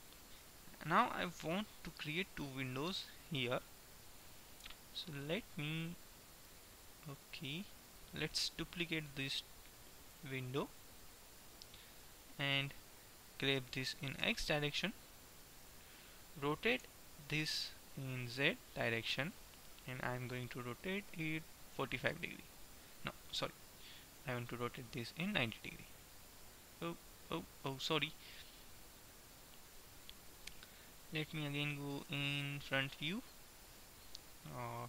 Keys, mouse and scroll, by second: 4.2 middle click, 6.0-7.5 middle drag, 10.2 shift+d, 13.9 g, 17.0 r, 25.9 KP_9, 26.0 KP_0, 32.2 KP_1.